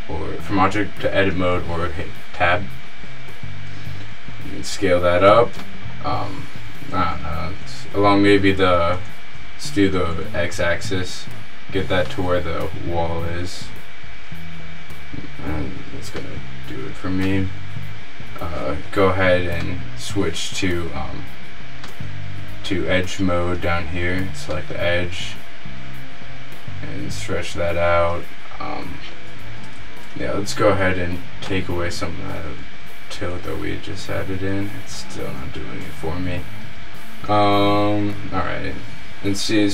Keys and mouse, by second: 0.0-0.5 drag, 0.7-2.0 middle drag, 2.8 s, 3.0-4.4 middle drag, 5.9 click, 6.3 s, 7.5 click, 13.8 s, 16.4-19.3 middle drag, 19.9 middle click, 22.0-23.9 right drag, 24.6-25.8 middle drag, 29.9 Tab, 31.6 right click, 31.8 click, 32.9 r.